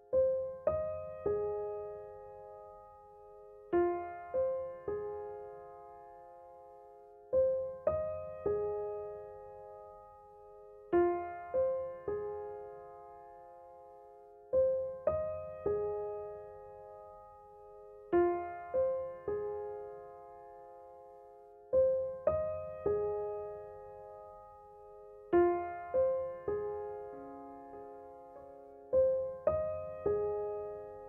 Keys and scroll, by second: 1.3 s, 5.4 s, 9.3 ctrl+r, 12.1 s, 18.1 3, 19.7 i, 24.8 s, 25.2 0, 29.7 Delete.